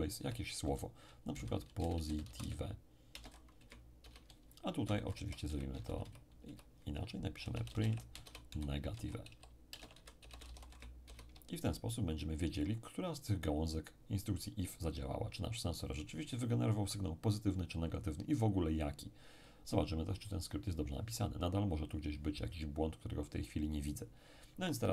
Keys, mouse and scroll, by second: 0.2 ', 1.3-4.0 typing, 4.9 Down, 5.1 Down, 5.4 End, 5.8 ctrl+Left, 6.4 Left, 7.4-10.4 typing, 10.7 ctrl+shift+e, 10.7 ctrl+shift+', 11.0 ctrl+shift+0.